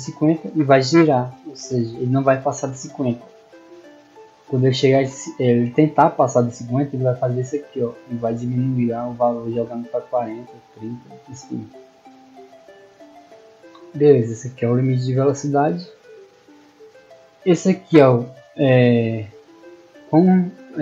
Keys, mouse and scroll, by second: 17.4 click, 18.4 click.